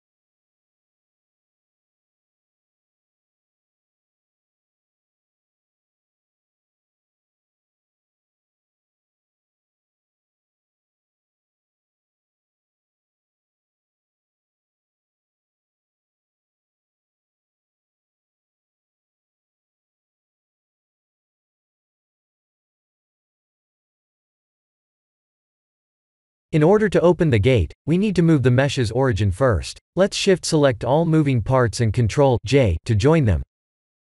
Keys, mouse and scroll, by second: 0.9 g, 8.8 middle click, 11.7 click, 13.6 click, 13.9 click, 16.7 click, 21.6 click, 23.7 ctrl+a, 24.7 click, 25.1 x, 25.7 middle click, 29.6 click, 31.3 shift+click, 32.4 shift+click, 33.6 ctrl+j.